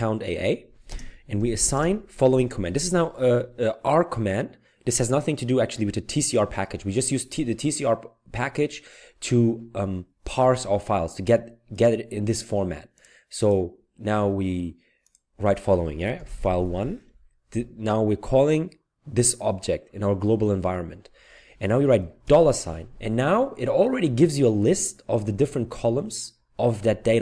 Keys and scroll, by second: 1.3 typing, 16.0-17.3 typing, 22.3 typing.